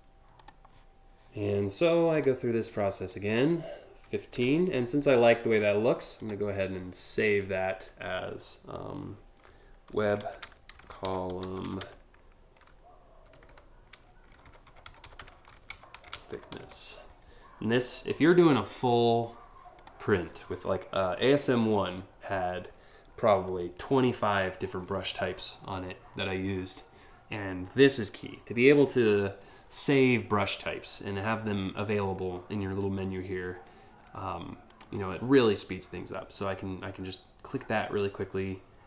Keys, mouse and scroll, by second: 0.0 click, 1.7 click, 2.7 click, 3.7 1, 5.8 click, 9.3-16.7 typing, 19.4 click, 20.9 BackSpace, 23.0 e, 34.3 click.